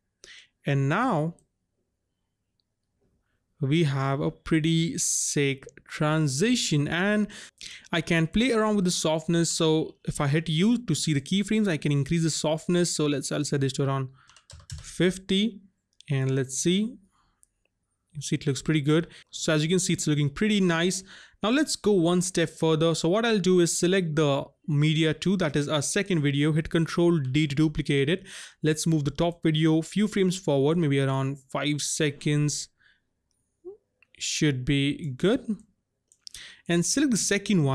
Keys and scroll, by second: 9.6 u, 14.3 KP_5, 14.5 KP_0, 14.7 Return, 27.2 ctrl+d.